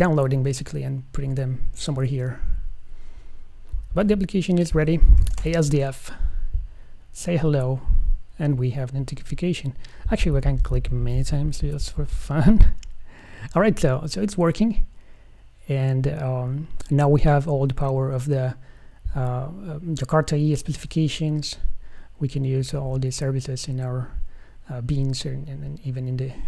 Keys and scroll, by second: 21.9 super+w.